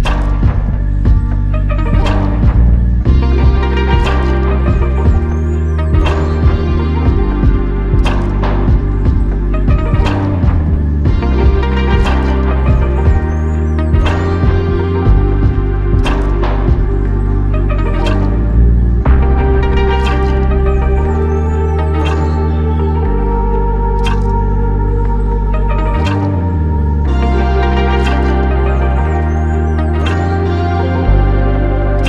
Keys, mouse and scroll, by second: 4.0 alt+click, 16.2 alt+click, 18.0 alt+click, 20.8 alt+click.